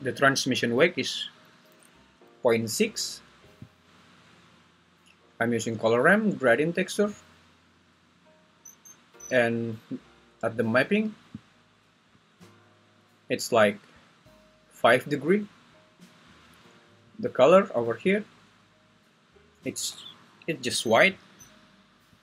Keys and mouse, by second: 5.8 click, 6.6 click, 11.6 click, 18.1 click, 22.1 click.